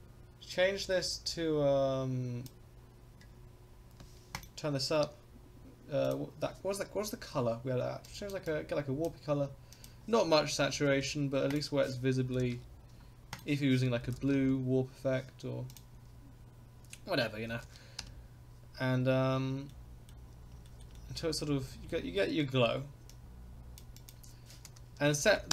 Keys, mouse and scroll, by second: 19.7 middle click, 20.3 scroll up 1, 20.7 shift+middle click, 20.9 middle click, 20.9 scroll up 1, 21.6 shift+middle click, 23.1 click, 23.9-25.5 drag.